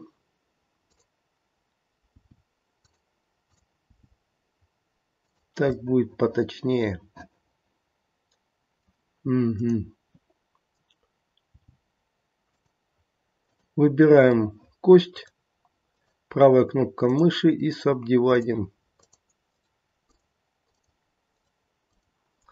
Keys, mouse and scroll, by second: 0.8 click, 2.0 g, 3.5 click, 3.9 g, 5.8 middle click, 6.6 middle click, 9.5 click, 11.5 g, 13.4 click, 14.3 middle click, 14.3 scroll up 1, 15.1 right click, 17.0 click, 17.6 right click, 19.0 click, 19.4 right click, 20.7 click, 21.2 right click, 22.4 scroll down 2.